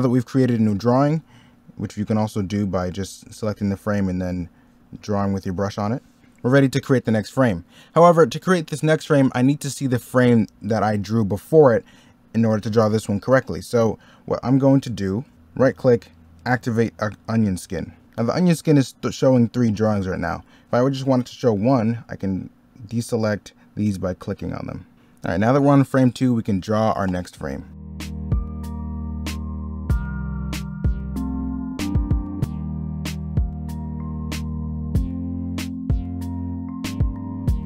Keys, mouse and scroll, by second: 2.9 e, 4.0 b, 5.5 ctrl+z, 6.2 middle click, 15.5 right click, 24.9 scroll up 1, 25.1 middle click, 27.7 e, 27.8 b, 28.1 ctrl+z, 28.6 ctrl+z, 29.1 ctrl+z, 29.7 ctrl+z, 29.9 ctrl+z, 31.0 ctrl+z, 31.8 ctrl+z, 32.4 e, 32.5 b, 32.7 ctrl+z, 33.5 ctrl+z, 34.4 ctrl+z, 36.4 ctrl+z, 36.7 ctrl+z, 37.5 ctrl+z.